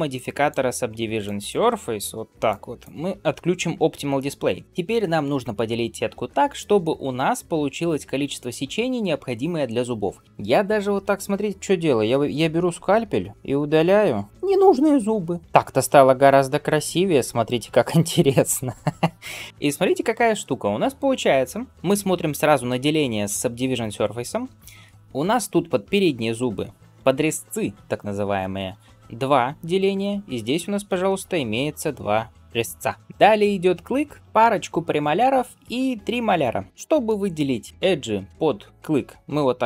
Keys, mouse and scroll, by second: 0.0-4.6 drag, 19.5 middle click, 21.7-23.6 shift+middle drag, 21.7-23.6 scroll up 1, 24.2 alt+z, 24.5 middle click, 36.7 shift+middle click, 37.2-39.2 middle drag.